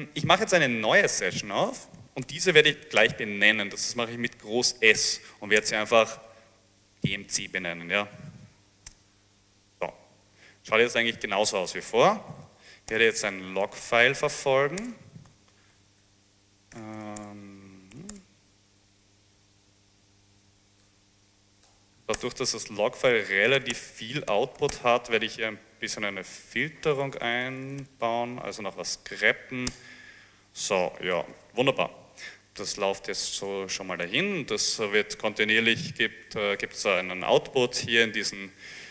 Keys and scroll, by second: 1.1-3.5 typing, 5.7-6.8 typing, 9.1 Return, 12.2-28.5 typing, 18.2 Tab, 29.7 Return.